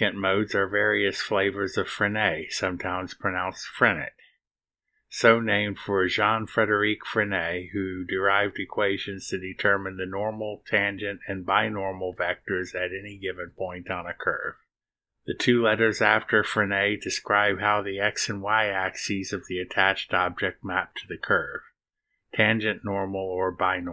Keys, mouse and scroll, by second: 3.2 click, 4.7-23.9 drag.